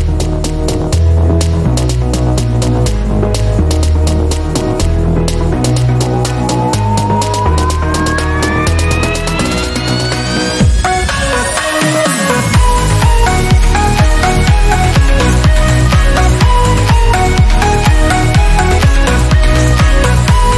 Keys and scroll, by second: 10.0 ctrl+alt+d.